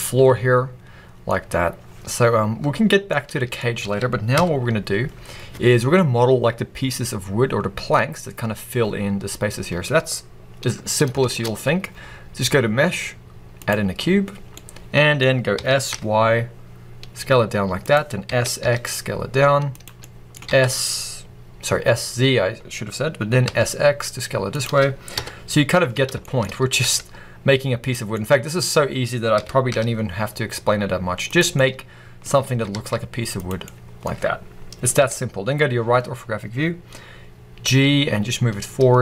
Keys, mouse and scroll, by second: 2.5 Tab, 3.7 alt+a, 4.3 KP_1, 5.6-7.9 scroll up 1, 9.0-9.4 scroll down 1, 9.4-11.1 scroll up 1, 11.1 shift+a, 13.0-17.8 middle drag, 14.0-14.4 scroll down 2, 15.5 s, 17.8 click, 18.1 s, 19.7 click, 19.9-24.5 middle drag, 20.3 s, 24.5 click, 25.0 KP_1, 25.8-26.1 scroll up 1, 26.1 shift+middle click, 26.4-27.8 middle drag, 26.4 s, 27.8 click, 28.0-29.2 middle drag, 29.2 s, 31.2 click, 31.4 middle click, 32.4 s, 33.3 click, 33.5-34.9 middle drag, 34.9 KP_3, 36.1-37.5 scroll up 1, 37.5 g.